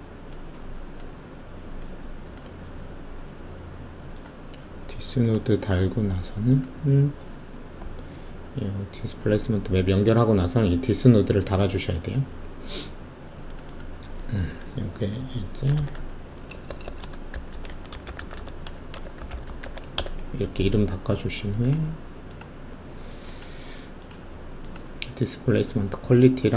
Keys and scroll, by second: 15.7-19.9 typing, 16.9 Caps_Lock, 19.9 Return.